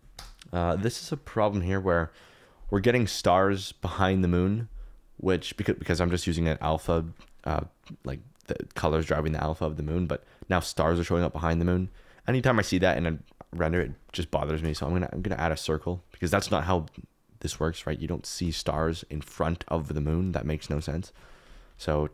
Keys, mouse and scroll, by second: 0.1 KP_0, 8.4 click, 14.6 shift+a, 18.4 KP_Decimal, 21.6 ctrl+1.